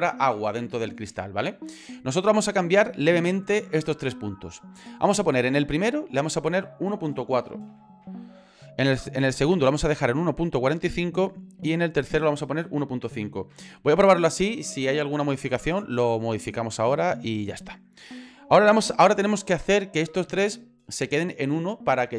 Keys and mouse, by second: 5.9-8.8 drag, 11.5-16.0 drag.